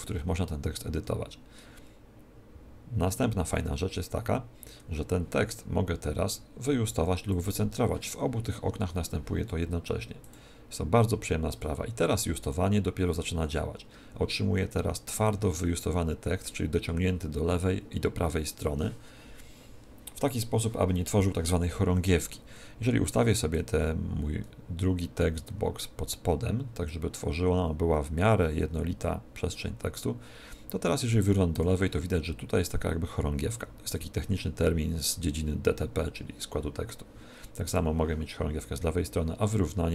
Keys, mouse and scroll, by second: 0.9 Tab, 7.2 click, 10.2 click, 11.4 click, 12.4 click, 23.4 click, 26.8 click, 31.5 click, 37.6 click.